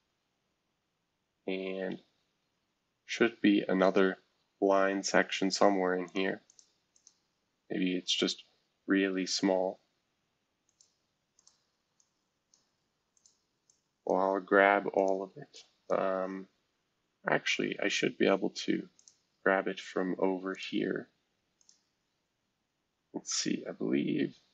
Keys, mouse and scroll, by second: 1.5 scroll down 2, 2.8-3.3 scroll up 2, 3.9 scroll down 1, 6.0 click, 6.5 click, 6.9 click, 7.8 scroll down 1, 10.6 click, 11.3 click, 11.9 click, 13.1 click, 13.6 click, 14.9 click, 15.5 click, 17.0 scroll down 1, 17.5 scroll down 1, 18.9 click, 20.5 click, 21.6 click.